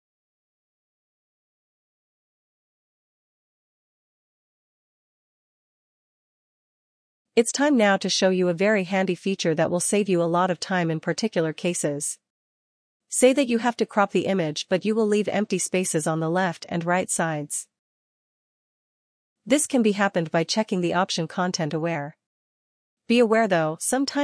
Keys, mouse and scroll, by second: 0.2 click, 4.1 click, 4.4 click, 14.2 click, 17.5 click, 19.4 click, 21.7 click.